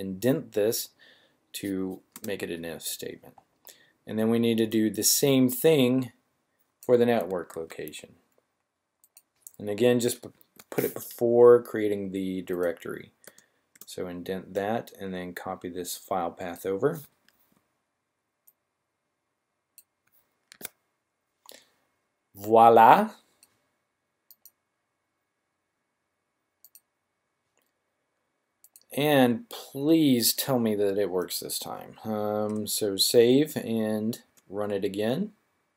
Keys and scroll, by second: 7.5 super+c, 10.4 v, 17.3 super+c, 20.5 super+v, 32.5 Up.